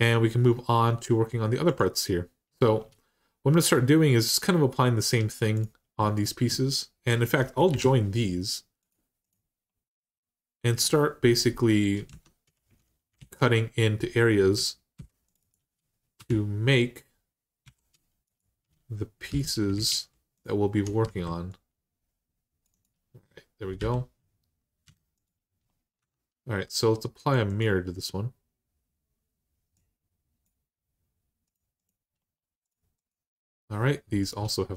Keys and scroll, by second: 7.5 ctrl+j, 11.9 Tab, 13.0 alt+z, 14.7 ctrl+r, 16.0 4, 17.4 r, 19.1 3, 19.7 alt+z, 20.8 x, 23.6 l, 24.6 x, 25.8 Tab.